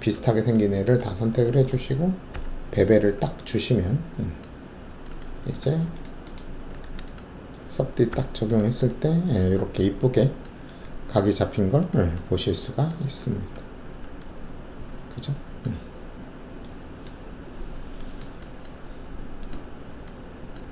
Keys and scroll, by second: 2.3 alt+shift+b, 4.7 alt+`, 6.8 alt+w, 8.1 3, 13.5 alt+1.